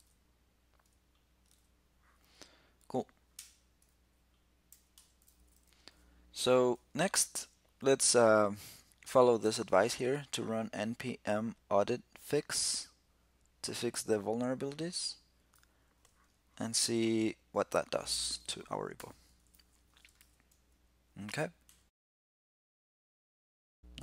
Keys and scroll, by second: 1.3 super+q, 18.8 ctrl+l, 19.9 super+v.